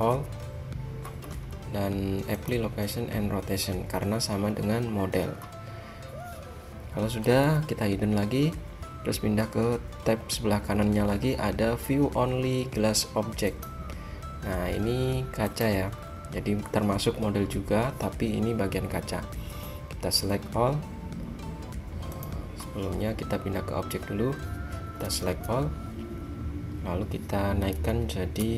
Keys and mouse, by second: 0.2 a, 2.4-4.2 drag, 7.5 h, 13.6-19.6 middle drag, 19.6 a, 22.3-24.0 drag, 25.1 a, 25.4 a, 27.8 g.